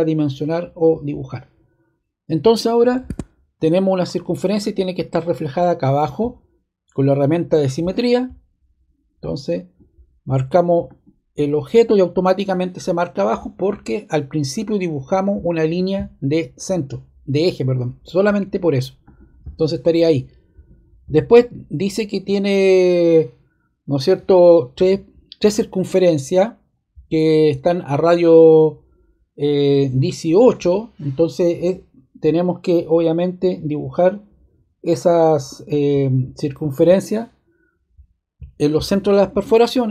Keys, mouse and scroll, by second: 3.0 ↺, 19.0-20.3 drag, 39.7-39.9 drag.